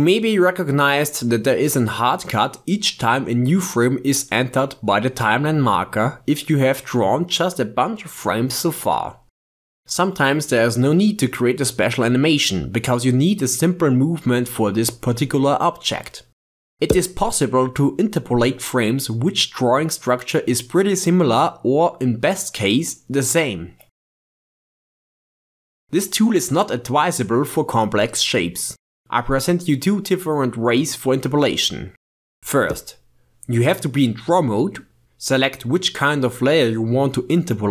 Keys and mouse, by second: 0.3-5.0 drag, 6.4 click, 6.8 shift+space, 11.3 shift+space, 13.2 shift+space, 15.1 shift+space, 17.0 shift+space, 20.9 shift+space, 24.2-27.2 drag, 32.7 ctrl+Tab.